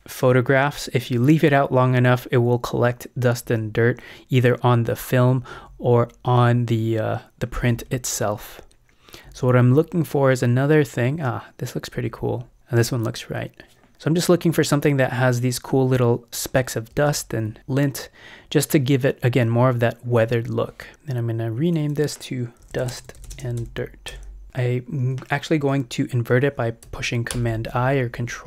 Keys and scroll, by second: 3.5 Down, 5.5 Down, 7.7 Down, 12.0 Down, 16.9 space, 20.3 alt+shift+Left, 20.5 alt+Return, 22.4-24.1 typing, 27.3 super+i.